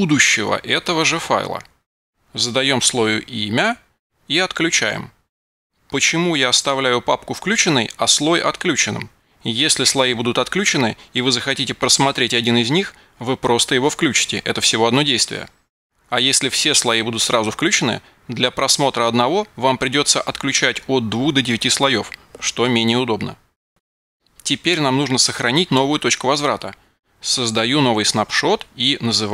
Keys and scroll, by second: 1.7 super+v, 4.7 b, 5.2 Return.